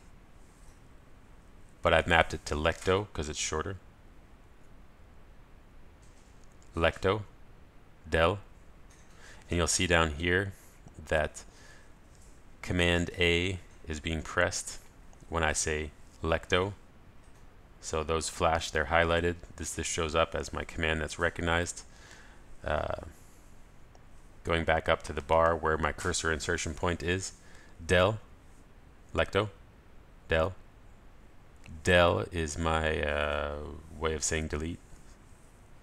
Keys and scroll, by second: 7.5 ctrl+alt+shift+super+a, 17.0 ctrl+alt+shift+super+a, 29.8 ctrl+alt+shift+super+a.